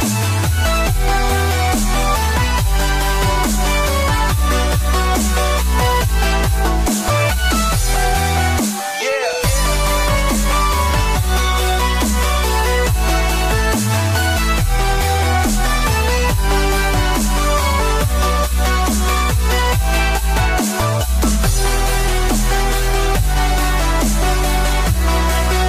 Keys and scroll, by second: 23.0 space, 23.2 space, 23.6 space.